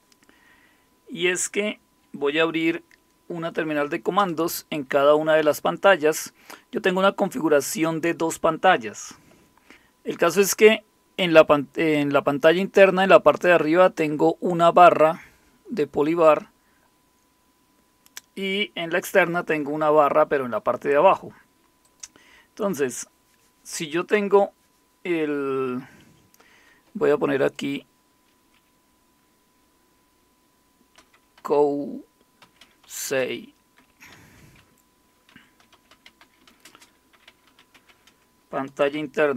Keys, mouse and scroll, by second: 4.2 super+Return, 21.8 click, 27.4 click, 30.7-38.9 typing.